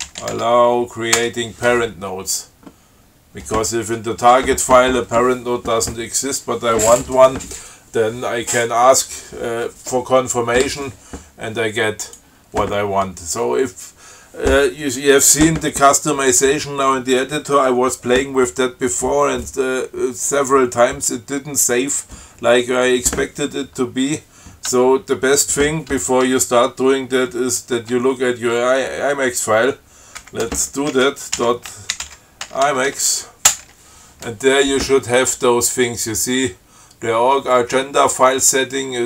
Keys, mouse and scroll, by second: 0.0-0.8 typing, 1.4 Return, 12.3 click, 30.4 ctrl+x, 30.7 ctrl+f, 31.6-33.7 typing, 33.7 Return.